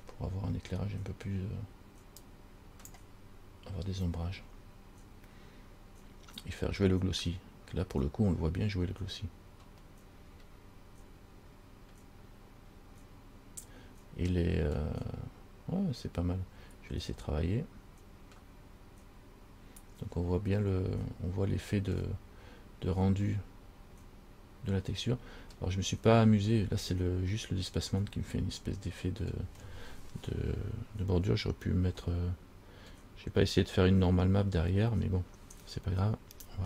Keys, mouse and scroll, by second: 2.4 click, 9.8 scroll up 1, 10.6 scroll up 1.